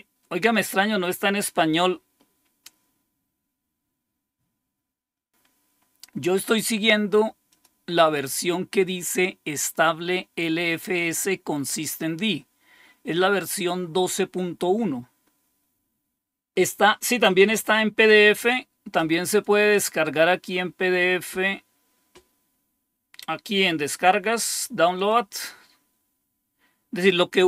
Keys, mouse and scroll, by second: 2.2-2.6 scroll up 2, 2.6 click, 5.2 scroll down 1, 7.4 click, 19.2 click, 20.4-22.7 scroll up 2, 24.9 click.